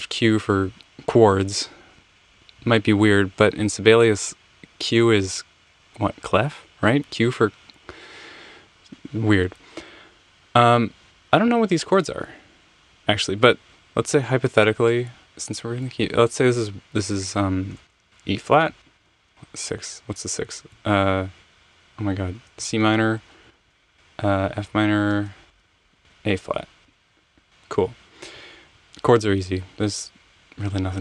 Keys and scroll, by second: 17.5-19.2 typing, 22.4-26.5 typing, 26.8 Return.